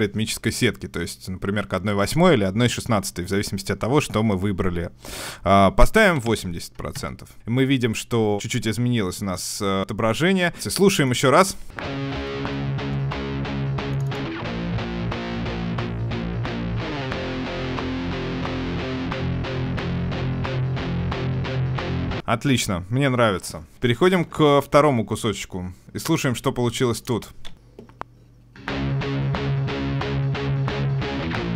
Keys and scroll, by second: 7.1 Return, 23.7 ctrl+alt+Left.